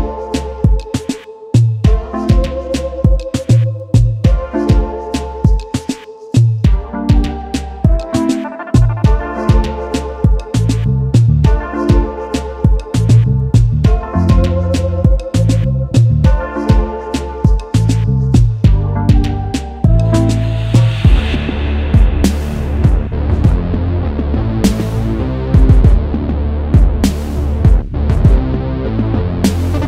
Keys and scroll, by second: 0.0-0.2 typing, 3.5 space, 5.9 space, 6.1 ctrl+s, 15.8 ctrl+s, 20.8 space, 23.7 space, 24.5 ctrl+s.